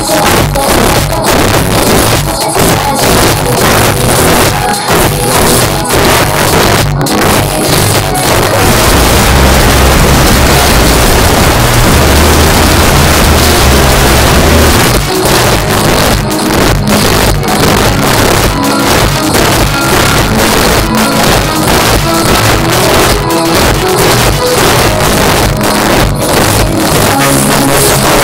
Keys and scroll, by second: 0.8-1.2 Up, 1.5 Return, 14.7 Page_Down.